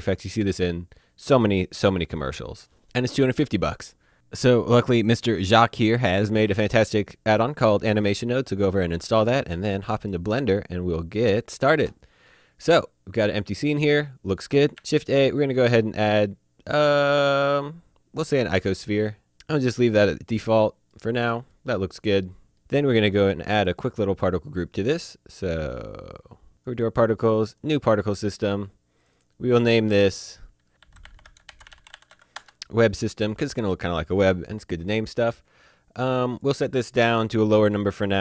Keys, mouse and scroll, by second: 4.7 click, 6.0-7.0 scroll down 1, 8.3-9.5 scroll up 1, 10.1 click, 12.3 middle click, 13.9-14.5 scroll up 1, 14.5 click, 14.8 a, 19.0 click, 20.4 middle click, 21.0-21.5 scroll up 1, 21.5 middle click, 25.9 click, 30.8-32.1 typing, 32.4 Return, 36.4 click.